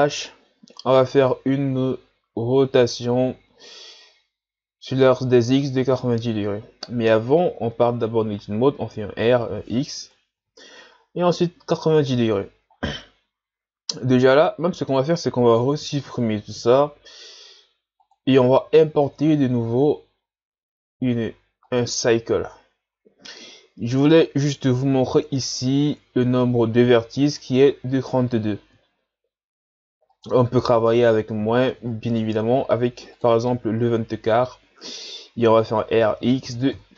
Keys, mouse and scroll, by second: 7.4 Tab, 8.9 r, 16.4 Delete, 19.1 shift+a, 30.1-33.1 drag, 35.5 r.